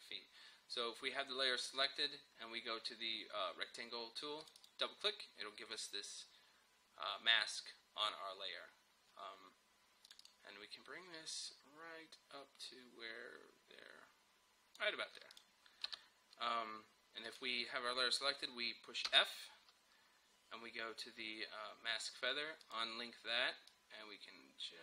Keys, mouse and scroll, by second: 1.8 click, 4.4 click, 5.7-7.2 scroll down 1, 10.1-15.4 drag, 15.9 Return, 17.3 click, 19.1 f, 22.6-24.8 drag.